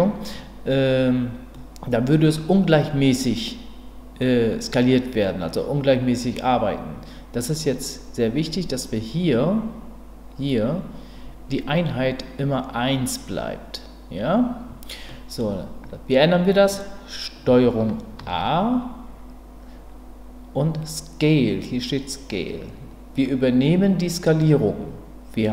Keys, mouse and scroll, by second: 1.5-2.3 middle drag, 4.2-6.3 middle drag, 15.1 middle click, 18.2 ctrl+a.